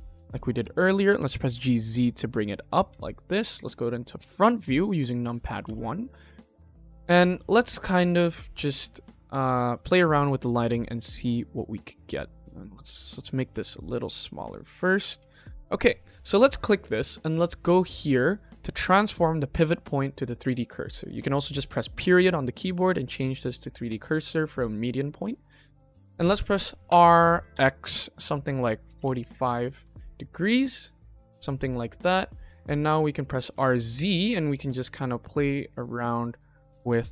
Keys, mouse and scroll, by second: 1.2 g, 2.8 KP_1, 3.3 click, 3.7 scroll up 1, 4.2 click, 4.7 shift+middle click, 5.0 shift+middle click, 5.6 g, 6.7 click, 7.1 click, 12.4 middle drag, 12.8-13.2 middle drag, 13.5 s, 14.9 click, 15.1 KP_1, 15.7 click, 18.6-20.2 drag, 25.9 click, 26.8 r, 30.6-31.7 middle drag, 32.2 scroll down 1, 32.7 scroll down 2, 32.9-33.2 middle drag, 33.4 r.